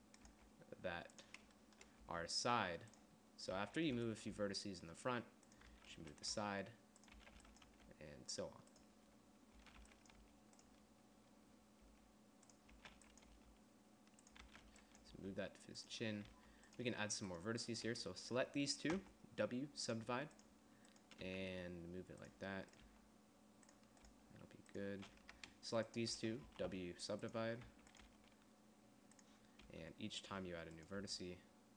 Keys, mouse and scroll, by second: 0.6 g, 2.3 g, 3.8 a, 4.2 b, 4.6 g, 6.0-8.0 typing, 9.9 a, 10.1 b, 10.5 g, 12.2 g, 13.1 a, 13.2 b, 13.6 g, 14.7 a, 14.9 b, 15.4 g, 16.6 a, 19.2 w, 21.5-23.0 drag, 21.5 g, 23.1 g, 24.4 g, 26.7 w, 27.9 a, 28.4 g, 29.9 g, 31.2 g.